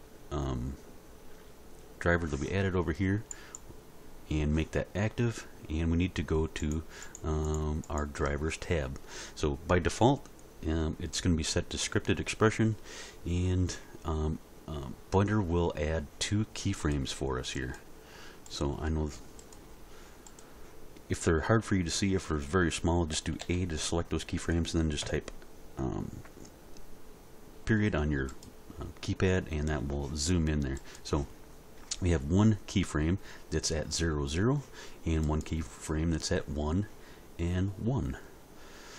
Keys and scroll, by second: 23.1 a, 25.0 ..